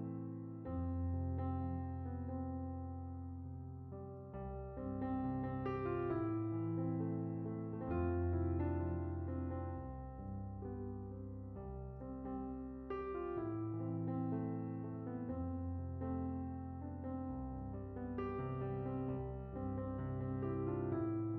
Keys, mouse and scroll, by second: 1.4-5.1 drag, 5.7 click, 7.3 click, 8.2 middle click, 9.1-10.4 drag, 11.0 click, 11.7-12.0 middle drag, 12.1 middle click, 16.2 click, 19.4 click.